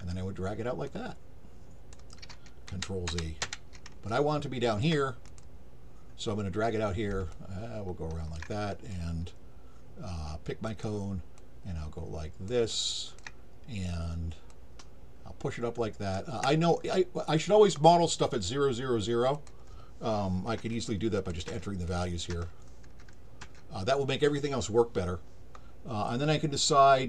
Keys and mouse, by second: 0.9-1.9 drag, 4.1 alt+click, 5.3 click, 7.3-8.3 alt+drag, 10.7 click, 11.4-12.5 drag, 12.7 alt+click, 14.5-16.1 drag, 19.3 click, 21.2 click, 21.9 click.